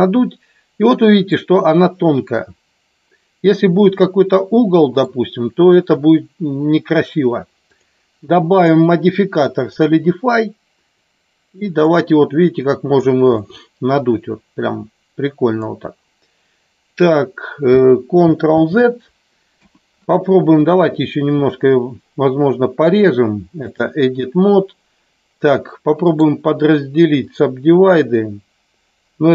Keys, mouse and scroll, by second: 3.9 middle click, 7.7 click, 8.6-9.8 drag, 11.0-13.0 drag, 13.5-15.6 middle drag, 18.5 ctrl+z, 19.5 KP_1, 22.8 click, 26.1-27.4 right drag.